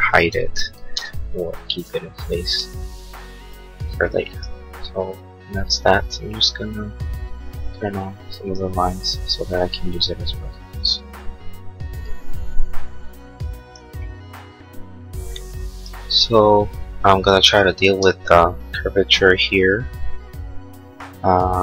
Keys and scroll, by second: 1.1 ctrl+z.